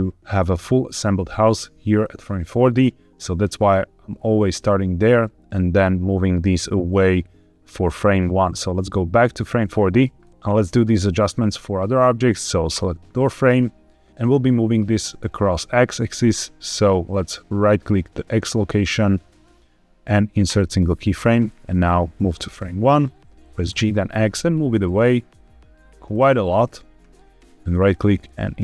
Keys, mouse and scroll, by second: 2.4-4.5 drag, 4.9-9.1 drag, 9.6-11.1 scroll up 2, 11.5-12.6 scroll down 1, 12.6 click, 14.0 middle click, 19.2-20.5 right drag, 21.8 click, 23.6 g, 23.8 x, 26.0 click, 26.3 scroll down 1, 27.6-28.6 right drag.